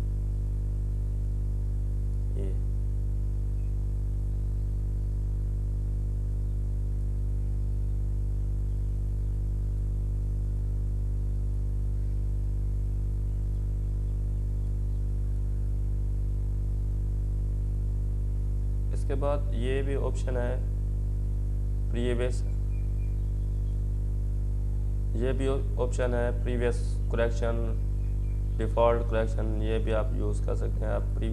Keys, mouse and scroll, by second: 0.0-1.7 drag, 6.1 click, 18.2 click, 18.2 click, 23.1 click.